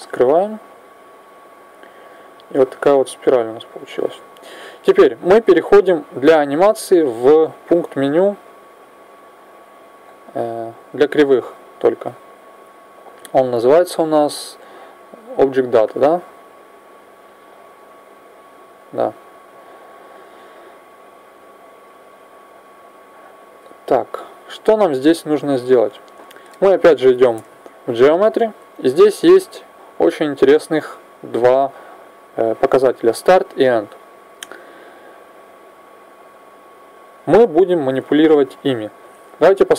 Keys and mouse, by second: 1.0-8.7 middle drag, 8.7-11.9 drag, 21.3-26.2 drag.